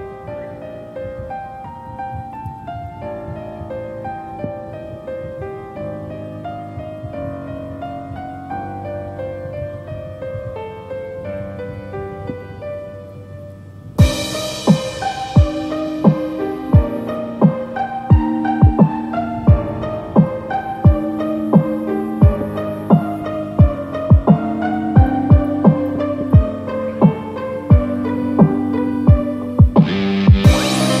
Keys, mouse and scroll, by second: 6.2 click, 6.5 scroll down 3, 6.8 middle click, 8.4 click, 8.7 scroll up 2, 9.3 KP_7, 9.8 scroll up 4, 10.4 shift+middle click, 12.8-15.1 scroll down 3, 15.1 middle click, 16.2 click, 17.3 scroll down 1, 17.8 KP_7, 19.8 i, 24.5 ctrl+z, 25.5-26.1 scroll up 2, 27.7 i.